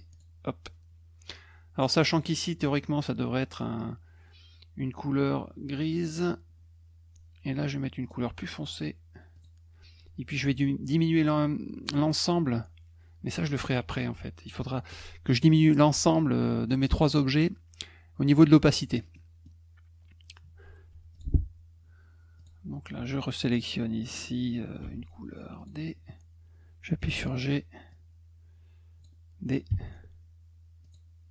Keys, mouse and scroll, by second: 0.1 click, 2.1 click, 6.1 click, 8.0 click, 9.3 click, 10.5 F1, 19.1 middle click, 20.9 F2, 21.1 click, 22.4 click, 25.6 click, 27.9-29.0 drag, 29.7 d, 30.8 click.